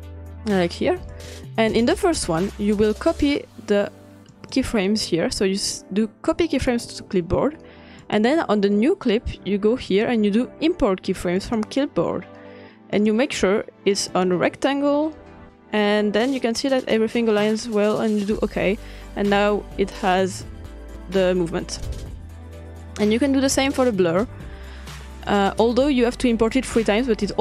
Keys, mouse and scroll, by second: 1.2 click, 3.1 click, 4.3 click, 6.7 click, 8.0 click, 9.9-11.0 drag, 11.4 click, 13.0 click, 14.1-15.8 drag, 18.2-19.4 drag, 21.8-23.3 drag, 23.7-25.2 drag, 25.5-26.5 drag, 26.7-27.4 drag.